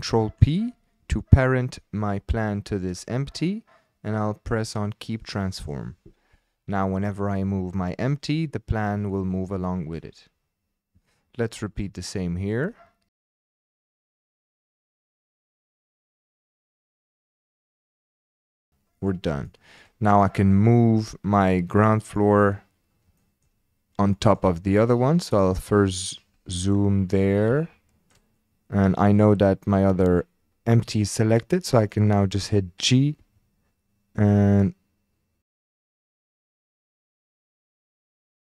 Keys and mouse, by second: 0.1 ctrl+p, 7.3 click, 8.1 g, 9.6 click, 11.1 shift+click, 12.3-12.7 shift+drag, 13.2 shift+click, 13.5 shift+click, 13.6 shift+click, 14.3 shift+a, 15.2 click, 15.3 shift+click, 15.5 ctrl+p, 15.9 shift+click, 16.0 shift+click, 16.3 shift+click, 16.5 shift+click, 16.7 click, 16.8 shift+click, 17.7 shift+a, 18.3 shift+click, 18.5 ctrl+p, 19.5 shift+click, 21.3 click, 23.2 shift+click, 24.2 shift+drag, 25.8-26.2 shift+drag, 27.6-28.1 shift+drag, 31.9-32.2 shift+drag, 33.2 g, 38.0 click.